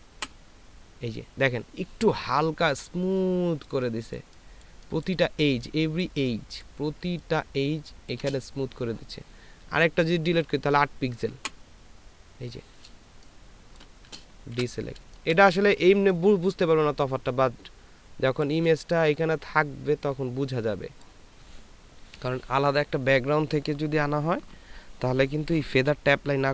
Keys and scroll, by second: 0.1 Delete, 4.0 space, 7.0 ctrl+space, 11.8 Delete, 14.5 ctrl+d, 15.0 ctrl+space.